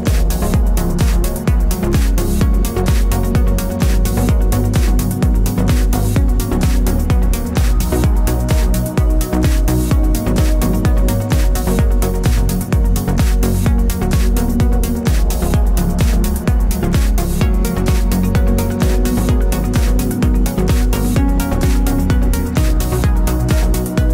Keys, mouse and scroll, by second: 0.3 click, 0.5 shift+z, 2.5 click, 2.6-4.8 middle drag, 4.0 alt+d, 4.8 click, 5.4 alt+d, 5.9 click, 5.9 r, 6.4 click, 6.5 s, 6.9 click, 7.2 alt+d, 8.3 click, 8.4-10.2 middle drag, 10.2 click, 10.3-13.4 middle drag, 11.7 g, 13.4 click, 14.2 click, 14.4 click, 14.7 click, 15.0 scroll up 1, 15.3 click, 15.8 click, 16.1-17.6 middle drag, 17.3 g, 17.6 click, 17.7 r, 18.8 click, 18.9 g, 19.4 click, 19.5 middle click, 20.4 click, 20.6 g, 21.4-23.7 middle drag, 22.1 g, 24.0 scroll down 1.